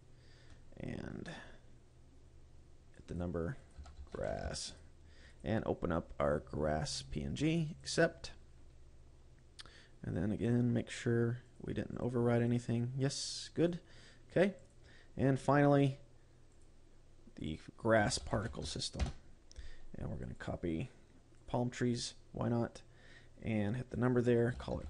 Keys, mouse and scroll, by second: 1.1-2.7 scroll down 3, 3.4 click, 4.1 click, 8.3 click, 10.9 click, 12.0 click, 12.4 click, 12.9 click, 14.1 click, 15.1 click, 15.5-16.5 scroll up 2, 17.0 click, 17.9 click, 20.7 click, 24.4 click.